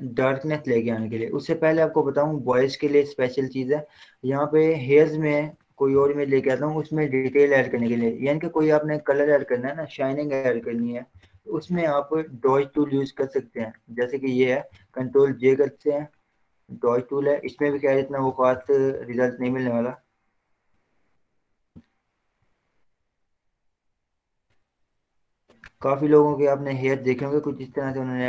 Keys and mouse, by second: 2.0 z, 2.1 right click, 2.7 click, 3.1 z, 4.8-7.0 drag, 7.0 ctrl+o, 9.9 click, 10.7 ctrl+0, 12.2 ctrl+z, 13.2-15.0 drag, 15.0 ctrl+j, 16.3 click, 17.6 ], 17.9 ], 18.1 ], 18.3 ], 18.7 ctrl+shift+l, 20.8-21.6 typing, 22.7-24.0 drag, 24.0 click, 25.0-26.5 drag, 26.5 click, 27.5 ctrl+0.